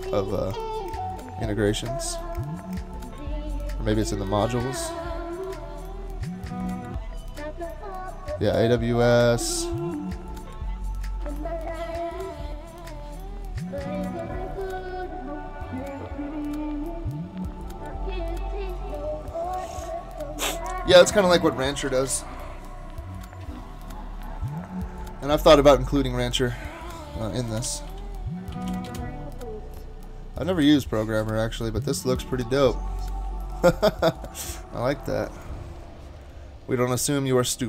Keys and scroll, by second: 27.4-29.2 typing.